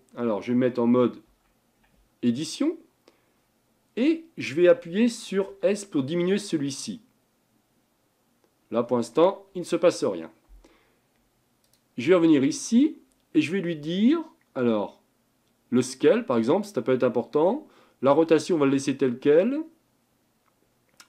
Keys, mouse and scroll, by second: 1.4 Tab, 5.6 s, 11.8-14.9 drag.